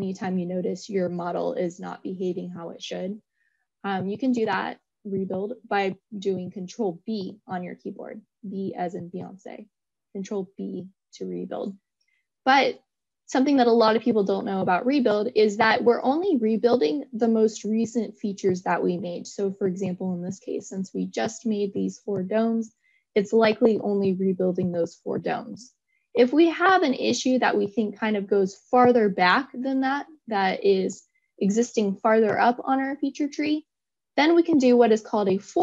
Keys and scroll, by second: 6.3 ctrl+b.